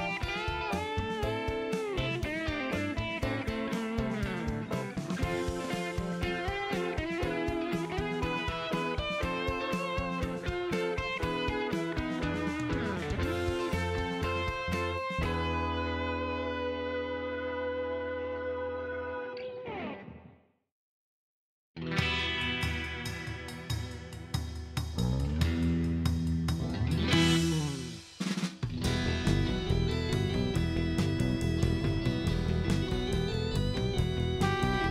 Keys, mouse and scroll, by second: 0.6 click, 2.9 click, 3.5 shift+right click, 5.9 click, 7.1 click, 7.8 right click, 10.9 click, 12.3 click, 13.1 click, 13.8 scroll up 1, 14.0 middle click, 14.5 scroll down 1, 14.7 middle click, 16.3 click, 18.6 click, 19.5 click, 19.8 middle click, 22.0 click, 23.1 click, 23.5 right click, 24.4 middle click, 27.2 click, 28.1 click, 29.3 click, 31.8 click, 32.8 click, 33.9 click.